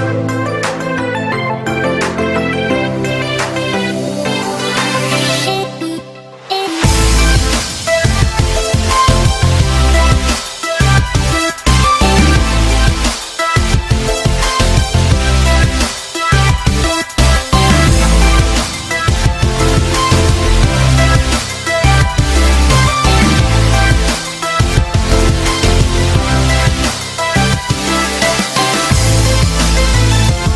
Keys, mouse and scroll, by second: 2.1 space, 5.2 right click, 12.5 space, 13.5 space, 16.7 ctrl+click, 17.5 space, 18.0 right click, 18.6 right click, 18.9 right click, 20.1 right click, 21.6 right click, 22.2 right click, 24.0 right click, 24.8 right click, 25.0 click, 25.2 click, 28.0 space, 28.6 right click, 30.3 right click.